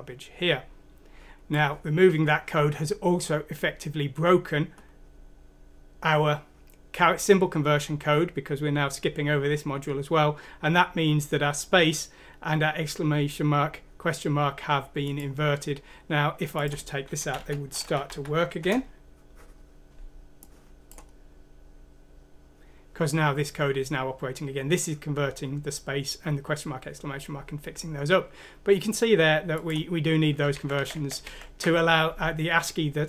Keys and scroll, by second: 17.3 Home, 17.7 ;, 18.0 F6, 18.6 Return, 30.5 ctrl+z, 30.7 ctrl+z, 30.9 ctrl+z, 31.2 ctrl+z.